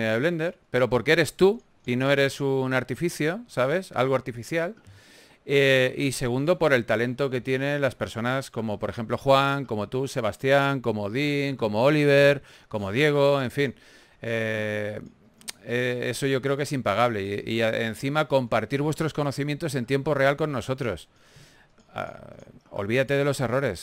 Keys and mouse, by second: 1.7 click, 4.7-5.8 drag, 7.6 click, 7.8 a, 8.4 ctrl+s, 8.8 right click, 12.3 click, 12.7 click, 13.3 g, 13.3 f, 14.5 f, 14.7-17.3 drag, 17.3 f, 21.4 f.